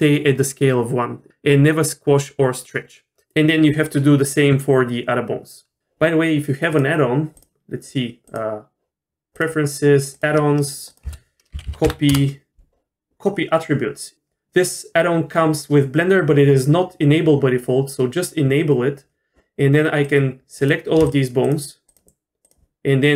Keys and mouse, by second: 6.7-7.5 drag, 8.2-9.5 drag, 21.4 shift+click, 21.9 shift+click, 22.4 shift+click.